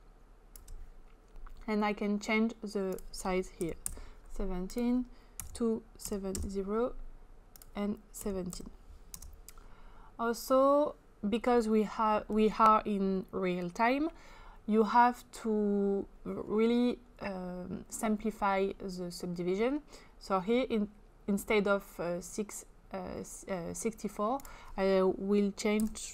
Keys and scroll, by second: 3.6-3.9 typing, 5.5-6.4 typing, 8.9-9.7 typing, 25.9 typing.